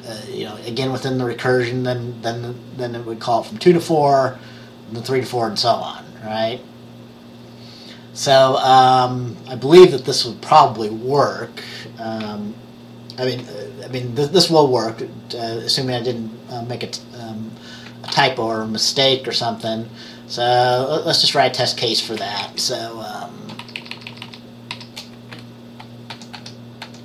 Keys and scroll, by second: 18.2 ctrl+s, 22.5 Left, 23.7 shift+Down, 23.9 shift+Down, 24.0 shift+Down, 24.2 shift+Down, 26.2 ctrl+c, 26.4 ctrl+v, 26.9 ctrl+v.